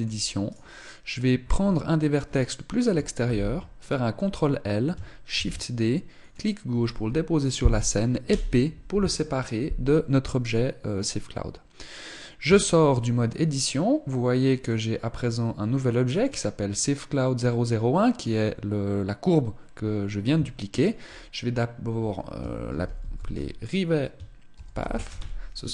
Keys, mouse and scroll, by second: 1.2-2.6 scroll down 1, 2.6 scroll down 3, 2.9 ctrl+l, 5.0 shift+d, 8.0 p, 12.1 Tab, 13.7 middle click, 15.0-15.5 scroll down 3, 15.8 click, 20.4 ctrl+click.